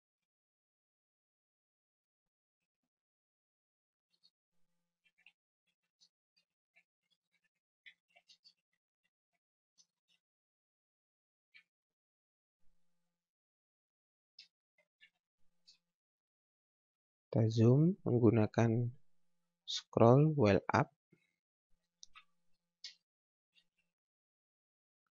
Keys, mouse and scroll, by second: 2.6 shift+l, 4.1-10.6 typing, 13.8-16.2 typing, 17.1-17.8 scroll up 1, 21.7-24.3 typing.